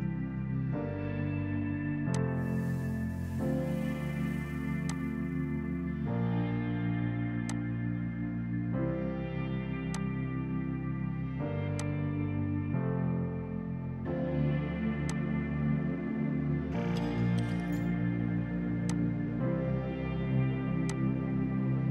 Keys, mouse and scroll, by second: 14.0 ctrl+z, 15.2 click, 17.8 space, 18.9 click, 21.2 alt+click.